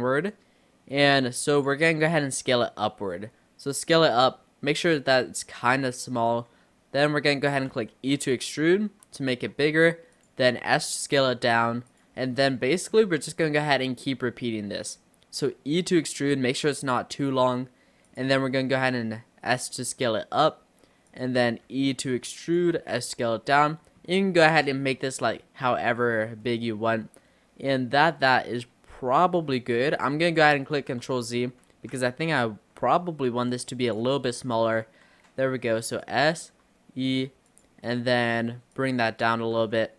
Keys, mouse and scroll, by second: 2.5 s, 7.8 e, 10.6 s, 12.4-15.6 shift+middle drag, 15.6 e, 18.4 s, 21.9 e, 22.8 s, 24.1 shift+middle click, 24.9-26.5 scroll down 3, 26.5-29.5 middle drag, 29.5-30.3 scroll down 1, 30.3 click, 30.8 ctrl+z, 31.1 ctrl+z, 31.3 ctrl+z, 31.5 ctrl+z, 32.5 s, 34.3-34.6 scroll up 3, 34.9 e, 36.4 s, 38.8 click, 39.6 e.